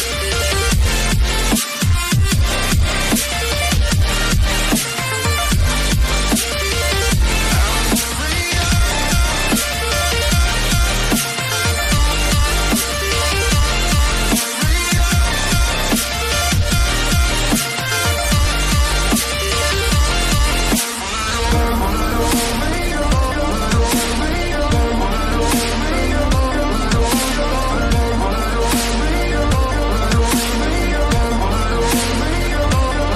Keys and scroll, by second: 27.5 g, 29.0 g, 29.0 BackSpace, 29.4 Caps_Lock, 30.5-33.1 typing.